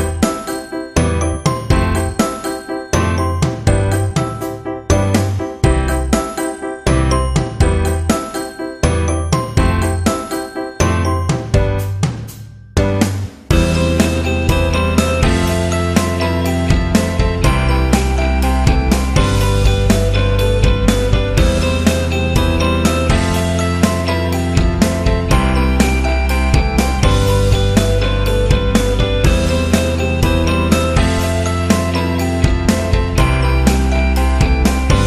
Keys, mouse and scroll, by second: 2.4 click, 9.0 click, 18.3 KP_5, 18.8 Return, 19.4 click, 22.5 alt+click, 24.0 shift+click, 29.1-35.0 alt+shift+drag.